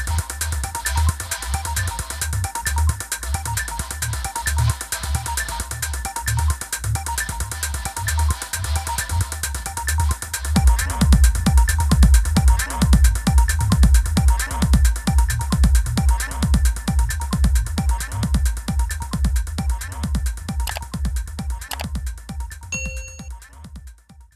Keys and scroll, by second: 3.8 v, 5.0 shift+Left, 5.4 shift+Right, 5.6 Left, 6.0 BackSpace.